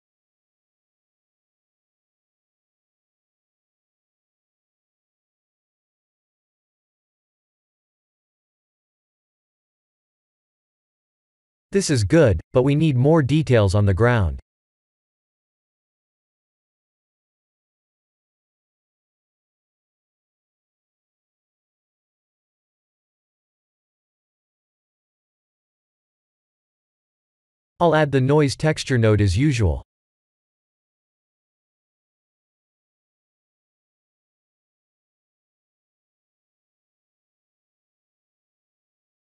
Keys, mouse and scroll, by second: 22.0 click, 22.7 click, 27.3 click, 29.3 shift+a, 33.7 click, 36.4 click.